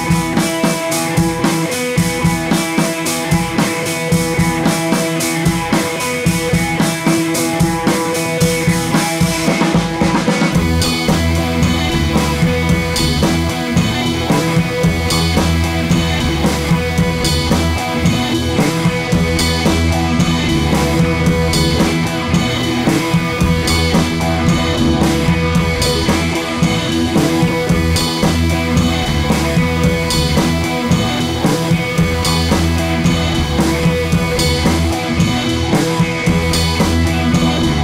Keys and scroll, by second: 4.7 Up, 4.9 Up, 5.1 Up, 5.3 Up, 5.5 Up, 6.0 Left, 7.3 Left, 7.8 Right, 8.3 super+d, 16.9 Right, 24.0 super+c, 24.1 super+v, 25.6 BackSpace.